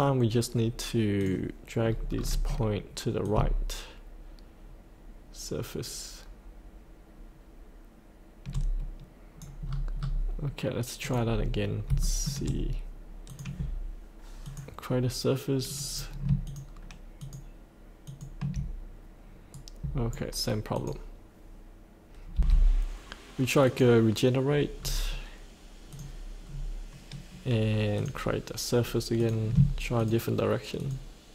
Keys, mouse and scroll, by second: 1.8-2.1 scroll down 1, 3.2-6.9 drag, 6.9-9.6 drag, 9.6 scroll up 1, 11.0 click, 11.7 scroll up 1, 12.0 shift+middle click, 13.3 click, 16.4 ctrl+click, 17.2 ctrl+click, 18.0 ctrl+click, 19.5 right click, 20.7 click, 22.3 F8, 23.6 click, 24.7-25.0 scroll up 1, 25.9 click, 26.4 scroll down 1, 27.9 click, 29.9 ctrl+click, 30.8 ctrl+click.